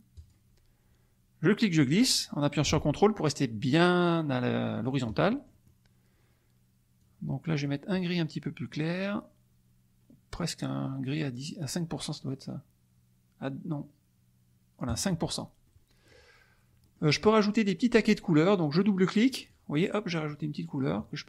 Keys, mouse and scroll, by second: 0.1 click, 1.5-5.1 drag, 5.3 ctrl+middle click, 7.0 click, 14.8 click, 15.6 middle click, 16.9 middle click, 19.4 click, 20.3-21.2 drag.